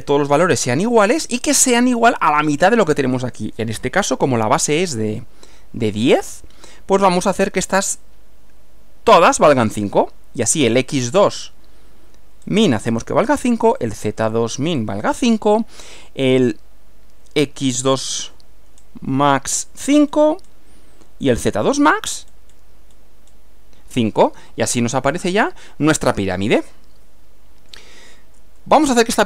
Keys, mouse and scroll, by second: 10.9 click, 11.5 scroll up 2, 12.5-13.1 scroll up 4, 13.9 click, 14.3 scroll up 1, 17.9 click, 18.8 scroll up 2, 19.3-19.7 scroll down 1, 20.5 scroll up 1, 21.3 click, 21.9 scroll up 1, 22.3-22.7 scroll down 2, 22.9-23.5 scroll down 4, 24.6-25.9 middle drag, 26.0-27.9 middle drag, 28.6 shift+middle click.